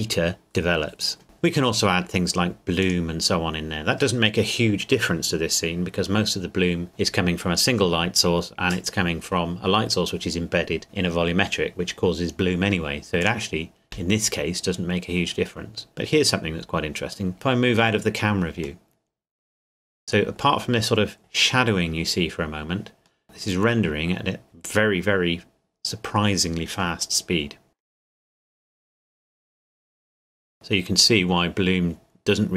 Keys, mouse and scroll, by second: 2.8 click, 13.2 click, 18.9 middle click, 23.2 middle click, 27.8 middle click, 29.2-30.0 scroll up 1, 30.2 middle click, 31.0 scroll down 1.